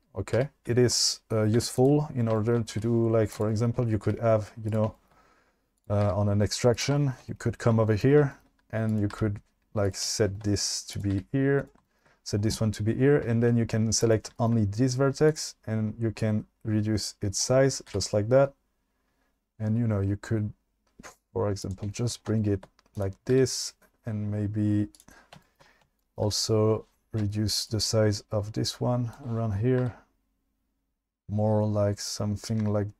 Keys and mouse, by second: 0.3 g, 0.6 2, 1.6 1, 2.8 g, 4.1 g, 5.8 click, 6.0 g, 6.8 click, 8.2 shift+middle click, 9.1 g, 11.2 g, 14.0 click, 15.3 click, 16.2-17.5 drag, 18.0 g, 21.6 click, 22.9 click, 23.3 g, 27.7-29.2 shift+drag, 29.9 g.